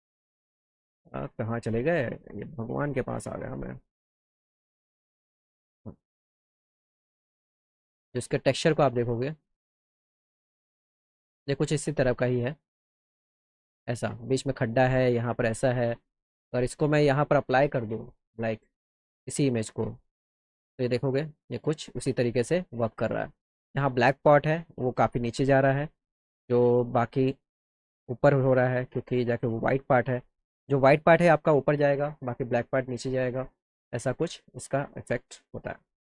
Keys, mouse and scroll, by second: 3.9 click, 5.4 click, 7.0 click, 7.1 click, 8.1 click, 8.3 click, 10.0 click, 12.4-14.3 drag, 16.6 click, 19.2 click, 21.1 alt+click, 24.9 alt+middle click, 26.1 alt+middle click, 26.9 click, 27.5 alt+middle click, 33.0 alt+middle click, 35.6 alt+middle click.